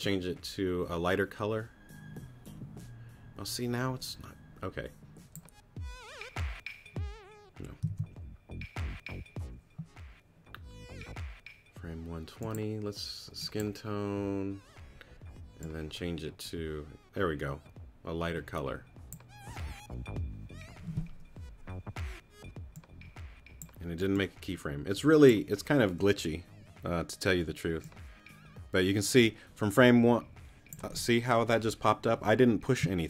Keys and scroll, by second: 8.1 super+z.